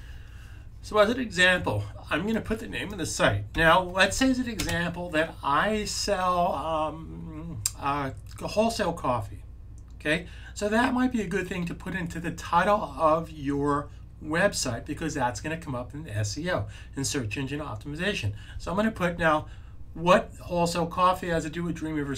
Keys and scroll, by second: 3.4 super+v.